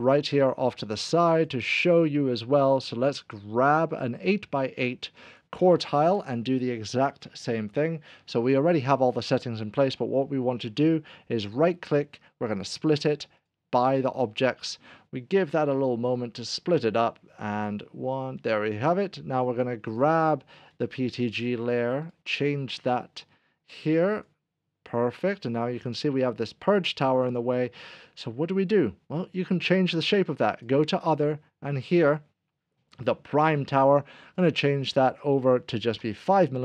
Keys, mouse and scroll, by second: 0.4 Delete, 0.4-1.4 scroll down 1, 1.4 click, 1.7 Delete, 2.8 Delete, 3.7 click, 11.5 right click, 13.4 click, 18.4 click, 22.0 right click, 24.2 click, 27.6 middle click, 34.4 click, 36.0 5.